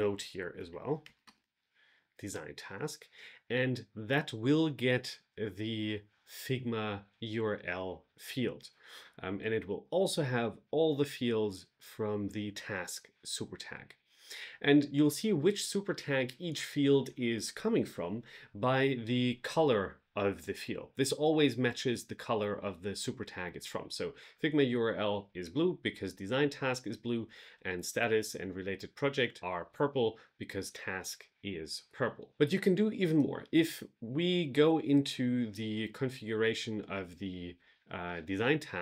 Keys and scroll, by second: 0.6 shift+3, 2.2 Return.